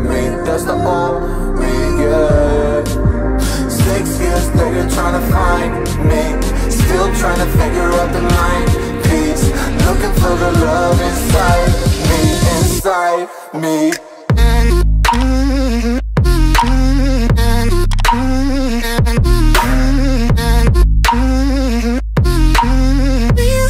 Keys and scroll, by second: 0.0 Return, 7.3 ctrl+z, 9.5 ctrl+z, 11.7 ctrl+z, 18.9 Return, 18.9 Up.